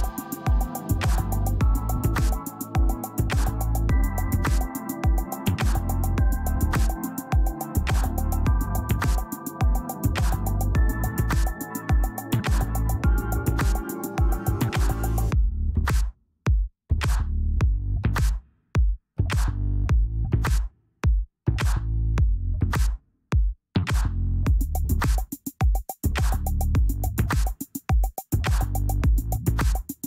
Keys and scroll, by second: 5.4 space, 7.0 ctrl+space, 14.3 F9, 20.3 ctrl+space, 20.5 ctrl+space.